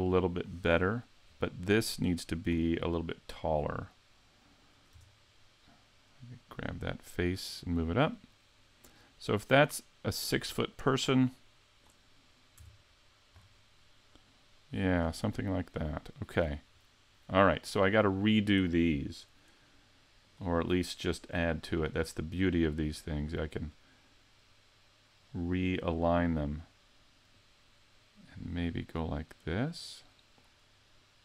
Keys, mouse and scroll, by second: 0.4 click, 0.9 right click, 1.3-2.1 scroll up 7, 4.9 Tab, 6.5 right click, 7.5 click, 12.6 Tab, 13.4-14.9 scroll down 5, 14.9 right click, 15.8 click, 18.0 right click, 20.2 click, 22.5 click, 27.3 click.